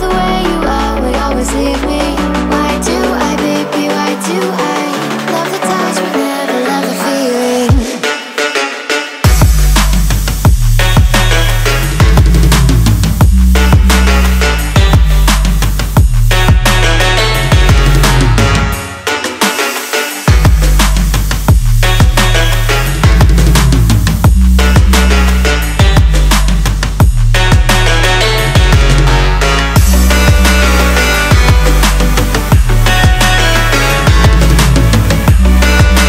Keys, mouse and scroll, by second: 1.1 click.